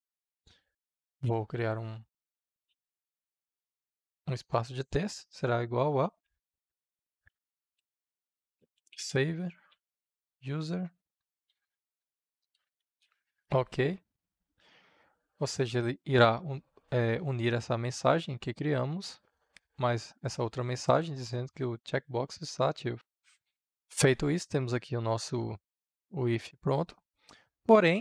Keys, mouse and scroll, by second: 1.0 shift+`, 2.0 space, 2.7 Left, 6.0-14.1 typing, 17.1-27.5 drag.